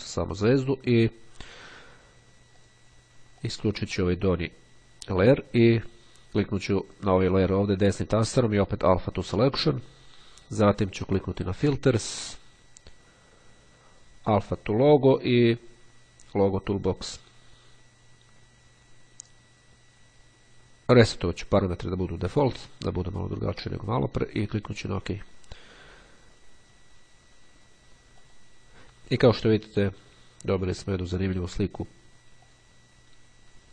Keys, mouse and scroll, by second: 2.6 click, 3.6 click, 6.9 click, 9.1 click, 11.7 click, 16.9 click, 20.7 click, 24.5 click, 28.3 click, 32.6 click.